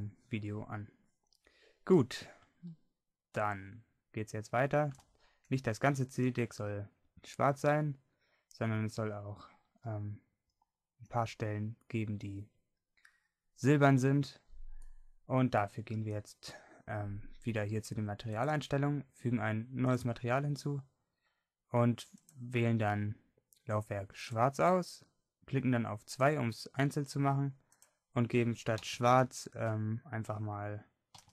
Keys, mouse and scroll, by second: 4.7 middle click, 10.1 middle click, 15.3 middle click, 15.9 middle click, 20.0-23.8 drag.